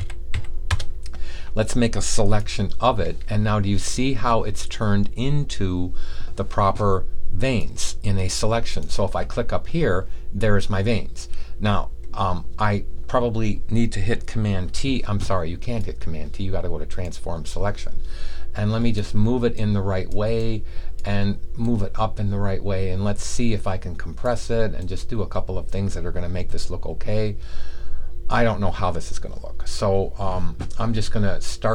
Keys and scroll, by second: 0.0-0.7 typing.